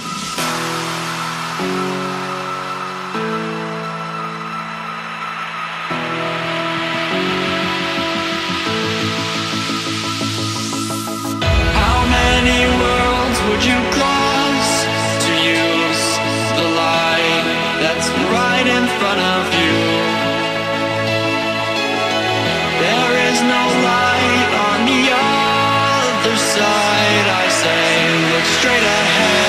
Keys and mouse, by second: 5.1 ctrl+c, 5.5 click, 9.6 click, 10.1 ctrl+a, 10.9 click, 14.8 ctrl+c, 15.4 click, 19.0 click, 28.4 click.